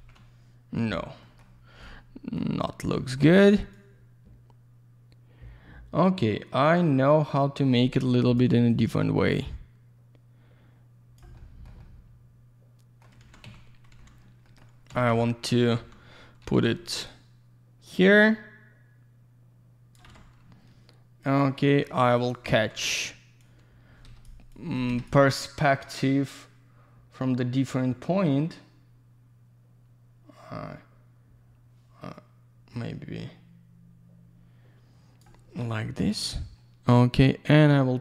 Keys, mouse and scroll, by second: 1.2 middle click, 1.5 scroll down 1, 1.8 alt+middle click, 2.6 scroll up 1, 3.0 alt+middle click, 3.7 click, 8.0 Escape, 8.7 click, 11.3 middle click, 11.8 alt+middle click, 13.2 alt+w, 13.9 alt+w, 14.4 middle click, 15.5 scroll down 1, 15.7-16.9 typing, 17.0 click, 21.2 click, 22.1 ctrl+click, 22.5 w, 23.4 click, 24.0 Escape, 24.5 click, 24.9 Escape, 25.3 click, 36.0 click, 37.7 click.